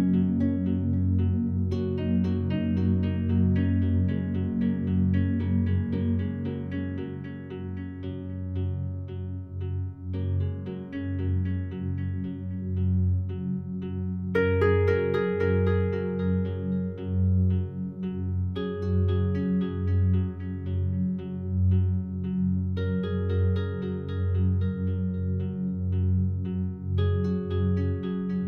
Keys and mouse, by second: 0.0-1.1 typing, 1.9 click, 2.8-3.9 typing, 5.5 click, 6.3 typing, 7.2 click, 8.8-9.5 typing, 9.7 click, 10.0 click, 10.5 click, 11.4 click, 12.8 click, 13.2 click, 14.3 click, 16.6 Tab, 16.6 typing, 18.4 typing, 19.1 click, 21.2 click, 22.2 click, 23.1 click, 24.8 g, 25.4 Escape, 25.8 e.